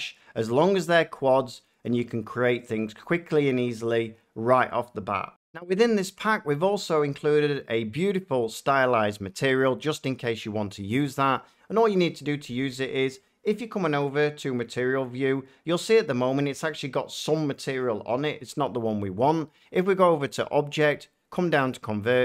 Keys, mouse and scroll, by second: 13.9-16.0 drag, 16.1 middle click, 16.9 shift+middle click, 20.2 click, 21.6 click.